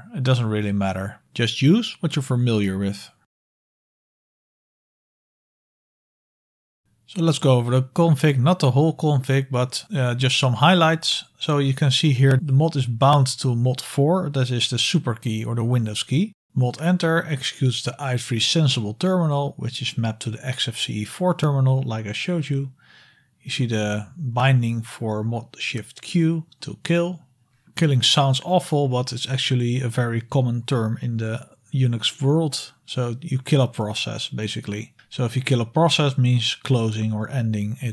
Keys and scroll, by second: 0.4 BackSpace, 0.5 BackSpace, 0.7 BackSpace, 0.9 BackSpace, 2.2-5.2 typing, 5.3 Tab, 5.6 Return, 6.4-9.2 typing.